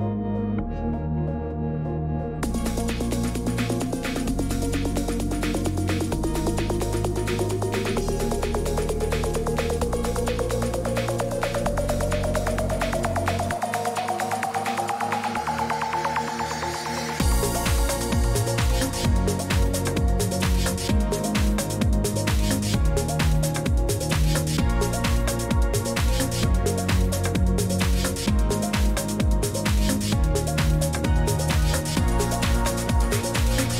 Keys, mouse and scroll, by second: 0.0-33.7 typing, 0.2 click, 1.6 click, 5.2 click, 8.6 click, 9.9 click, 15.3 click, 16.6 click, 18.0 click, 21.4 click, 22.8 click, 24.6 click, 25.2 Escape, 30.7 click, 33.0 click.